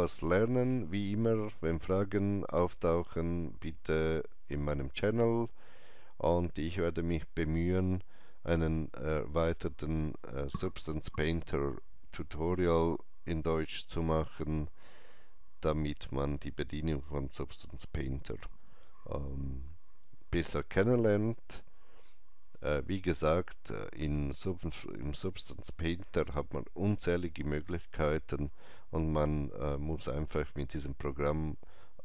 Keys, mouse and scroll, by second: 24.8 click.